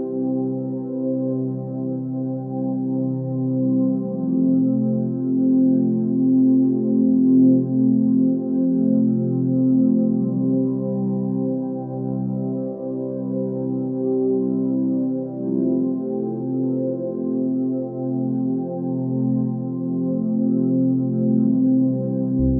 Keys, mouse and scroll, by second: 5.4 scroll down 1, 6.0 scroll down 1, 8.9 space, 10.1 b, 16.2 ctrl+z, 16.5 x.